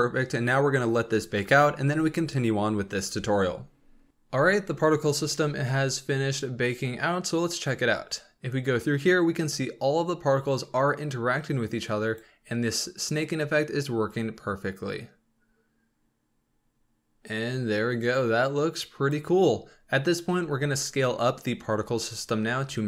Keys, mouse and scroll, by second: 4.1-6.7 drag, 8.1-11.2 drag, 14.2-17.3 drag, 22.0-22.8 scroll up 7.